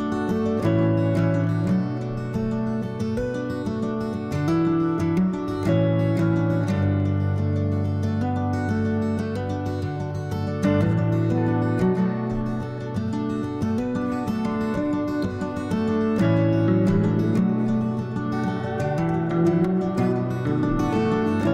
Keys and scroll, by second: 0.7 s, 7.1-8.5 typing, 18.7 ctrl+z, 20.8 s.